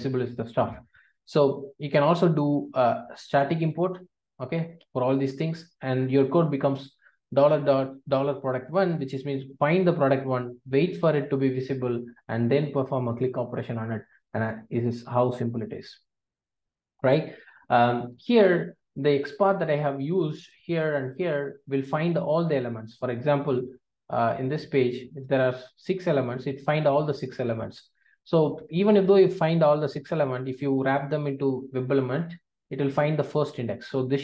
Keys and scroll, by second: 1.9 alt+Return, 5.4 alt+Return, 13.1 Return, 15.0 Return, 15.0 ctrl+alt+o, 15.9 alt+super+l.